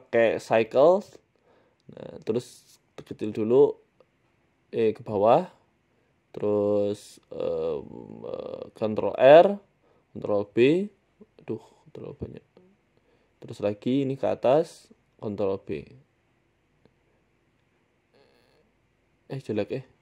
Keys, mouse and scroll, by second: 0.9 shift+middle click, 1.5 s, 2.5-2.8 scroll up 8, 2.9 shift+middle click, 3.2 s, 3.7 scroll down 6, 3.9 shift+middle click, 4.3 Tab, 5.0 e, 6.0 scroll up 2, 7.0 ctrl+e, 7.6 e, 8.2 ctrl+z, 8.7 ctrl+r, 9.2 s, 10.2 ctrl+b, 13.3 click, 14.4 g, 15.4 ctrl+b, 19.0 Tab, 19.8 Tab.